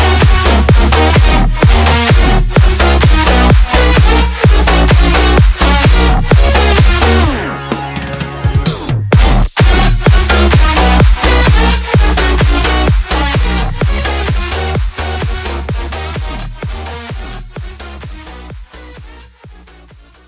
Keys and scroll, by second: 0.2 Return.